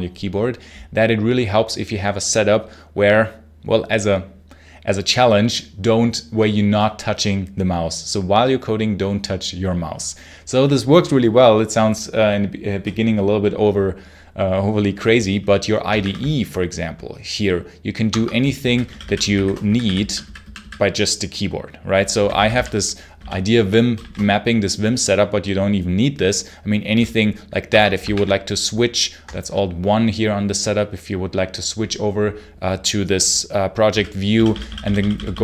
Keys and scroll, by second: 15.8 alt+1, 17.9 Escape, 18.2-20.3 typing, 22.0 j, 23.0 Home, 23.8 shift+a, 27.5 Escape, 28.0 alt+1, 33.7 j, 34.2 k.